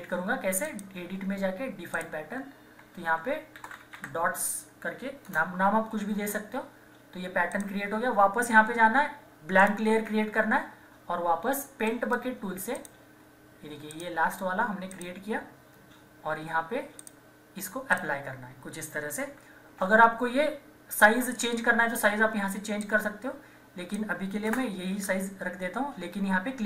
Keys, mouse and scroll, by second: 0.6 click, 0.6 typing, 3.3-4.4 typing, 5.3 Return, 7.5 click, 11.9 right click, 12.7 click, 18.1 typing, 19.4 ctrl+-, 20.9-24.4 drag, 24.4 Return.